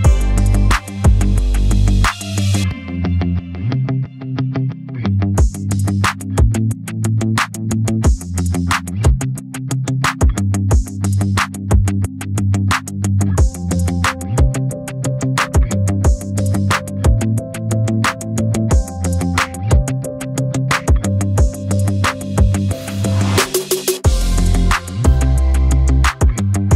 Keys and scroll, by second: 26.1 s.